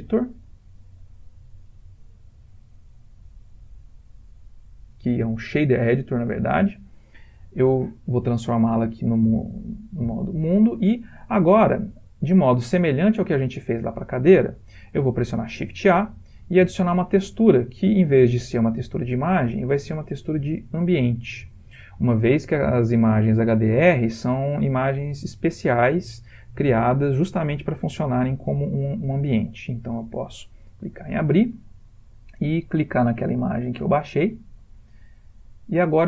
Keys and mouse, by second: 7.3 middle click, 7.4 middle click, 8.2 click, 11.4 ctrl+middle click, 12.0 ctrl+middle click, 12.3 middle click, 12.8 ctrl+middle click, 12.9 ctrl+middle click, 13.1 ctrl+middle click, 13.4 ctrl+middle click, 13.7 ctrl+middle click, 15.6 shift+a, 25.7-26.5 typing, 29.9 click.